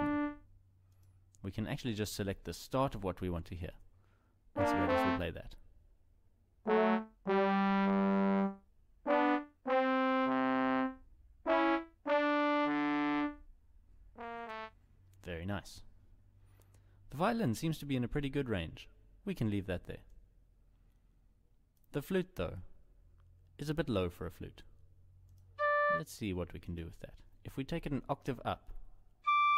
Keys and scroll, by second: 28.7 ctrl+Up.